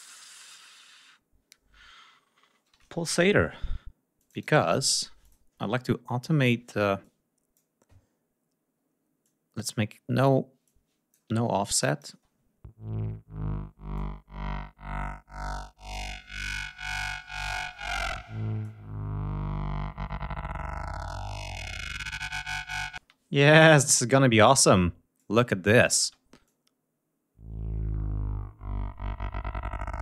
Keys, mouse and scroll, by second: 2.5-3.6 typing, 4.2 click, 5.2 click, 7.0 click, 9.2 click, 10.6 click, 11.8 click, 12.1 space, 13.9-16.1 drag, 18.6-22.9 drag, 23.1 space, 24.6 click, 25.8 click, 26.0 space.